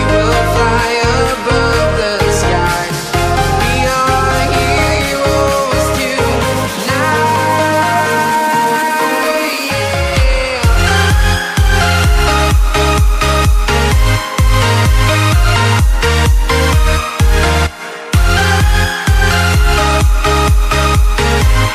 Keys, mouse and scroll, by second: 0.6 click, 1.3 Right, 2.2 Return, 3.7 click, 5.7 c, 5.9 Tab, 6.4 ctrl+v, 7.0 click, 8.6 ctrl+t, 8.9 Return, 9.2 click, 9.9 ctrl+t, 10.1 click, 11.1 Return, 12.2 click, 12.6 alt+Tab, 13.1 click, 13.7-14.0 typing, 14.4 Down, 15.0 shift+Left, 15.7 ctrl+c, 16.1 alt+Tab, 17.0 j, 18.4 v, 18.9 click, 19.1 t, 19.4 click, 20.9 Return, 21.1 Right, 21.5 Down.